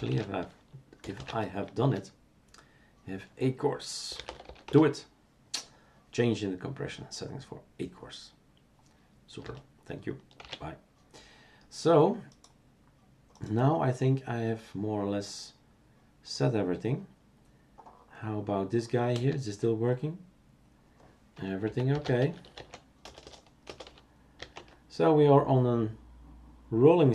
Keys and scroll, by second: 0.0-1.6 typing, 1.8 Return, 3.8-5.1 typing, 10.5 shift+super+q, 19.1 space, 21.6-23.2 typing, 24.3-25.0 typing.